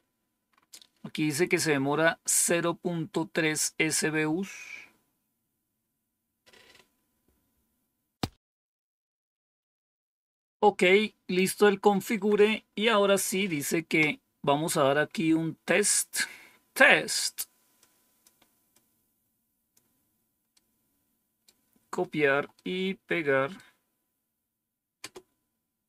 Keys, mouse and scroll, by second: 8.5 click, 9.5 Up, 12.0 Down, 17.7 click, 18.6 click, 20.4 right click, 22.4-23.5 right drag, 24.9 Return.